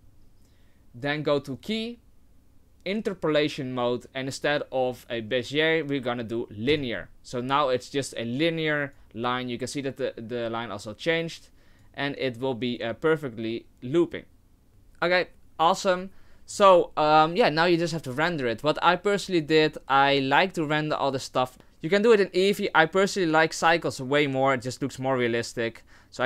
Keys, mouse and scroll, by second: 1.5 click, 8.2 click, 11.5 click, 20.1 click.